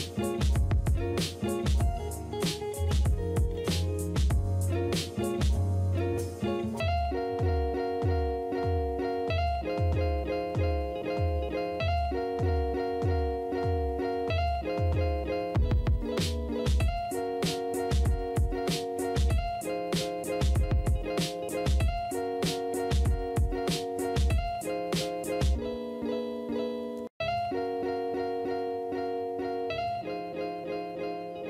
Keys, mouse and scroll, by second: 11.0 space, 14.7 space, 21.5 space, 26.7 space.